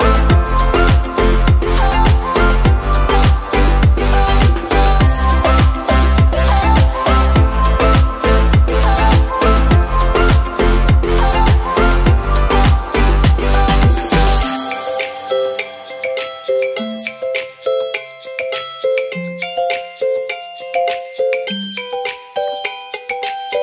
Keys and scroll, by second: 19.2 ctrl+z.